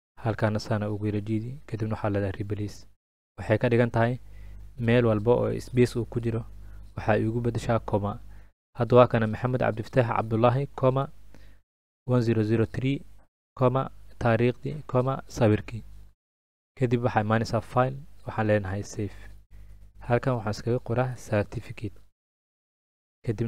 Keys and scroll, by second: 20.4-22.9 typing.